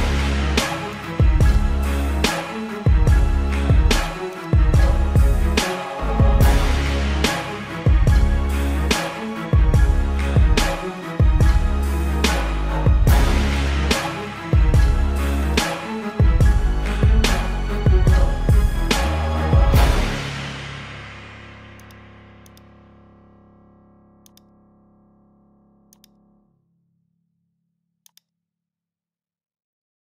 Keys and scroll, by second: 0.2 space, 5.5 ctrl+-, 6.4 ctrl+alt+z, 8.1 ctrl+-, 10.2 ctrl+-, 11.0 ], 11.5 ctrl+-, 12.2 space, 13.4 ctrl+alt+z, 17.2 ctrl+alt+z, 22.7 ctrl+alt+z.